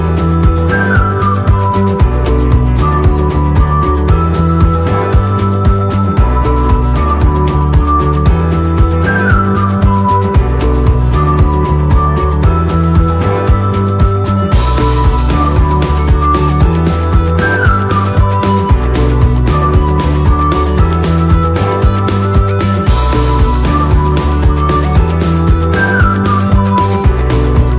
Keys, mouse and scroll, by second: 0.6 click, 1.1 right click, 1.5 right click, 5.2 p, 7.7 click, 10.3 click, 12.1 click, 18.2 click, 23.0 shift+click, 24.3 click, 27.1 click.